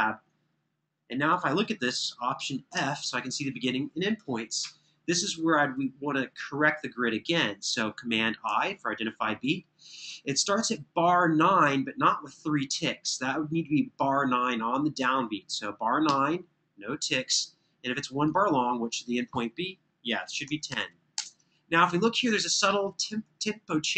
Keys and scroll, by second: 2.4 alt+f, 8.1 super+i, 15.9 9, 20.2-21.0 typing.